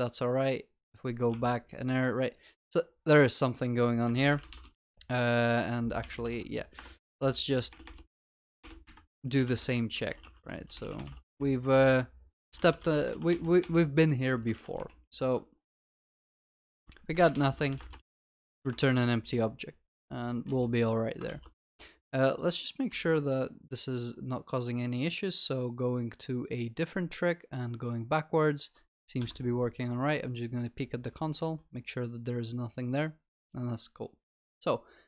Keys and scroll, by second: 13.3 ctrl+BackSpace, 18.9 ctrl+s.